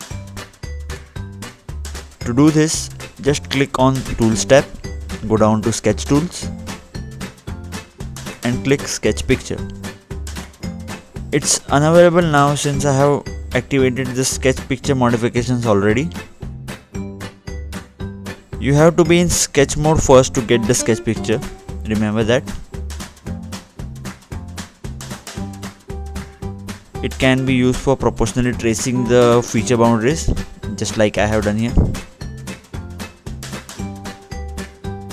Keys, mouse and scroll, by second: 0.1 click, 2.8-4.1 scroll down 1, 5.2 click, 6.7 click, 7.4 scroll down 2, 8.9 click, 9.4 double click, 9.6 click, 9.8 double click, 10.0 click, 10.2 double click, 10.4 click, 10.6 double click, 10.8 click, 11.2 double click, 13.9 double click, 15.2 click, 18.7 click, 19.1-20.3 scroll down 2, 20.7 scroll down 1, 20.9 click, 23.5 click, 24.0-24.5 scroll up 1, 24.5-25.3 scroll down 2, 26.4 click, 27.5-28.0 scroll up 2, 28.0 click, 29.5-30.1 scroll up 1, 30.1-31.3 scroll down 2, 33.4 click, 33.8 scroll down 2.